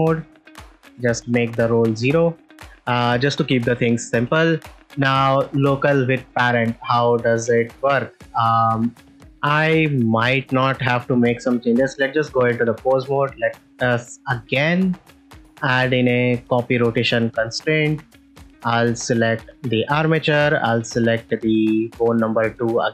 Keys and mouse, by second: 0.3-1.8 drag, 2.5 ctrl+Tab, 2.7 click, 3.2 middle click, 4.2 ctrl+s, 5.0 middle click, 10.1 click, 10.9 click, 11.7 ctrl+Tab, 13.8 drag, 15.0 click, 15.4-16.5 drag, 20.5-22.5 drag.